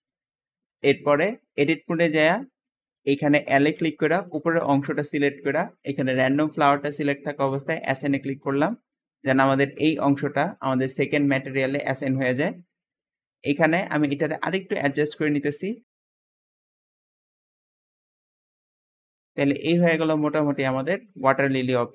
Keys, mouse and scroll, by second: 0.5 click, 1.0-1.9 drag, 1.6 Tab, 2.7 click, 3.7 l, 7.6 click, 9.0 `, 9.6 click, 10.3-12.5 drag, 12.5 Escape, 12.8 middle click, 13.7-14.0 scroll up 1, 14.0-14.7 shift+middle drag, 14.7 s, 15.0 z, 15.7 click, 16.1 click, 16.3 shift+middle click, 16.5 scroll up 1, 16.7 alt+z, 16.8 click, 17.0-18.4 typing, 17.4 shift+middle click, 17.6 scroll up 1, 18.8 Tab, 18.9 scroll up 1, 19.0 middle click, 19.1-19.6 scroll down 6, 19.4 scroll up 1, 19.6-20.0 scroll down 1, 20.0 click, 20.3 shift+middle click, 20.8-21.9 shift+middle drag.